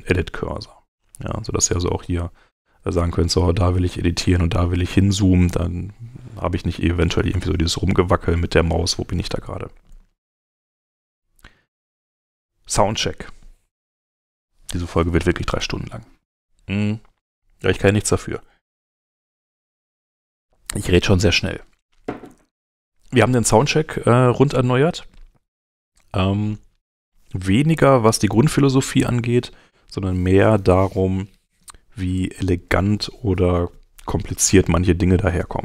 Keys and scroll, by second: 9.2 super+Tab, 25.5 super+Tab, 28.3 alt+-.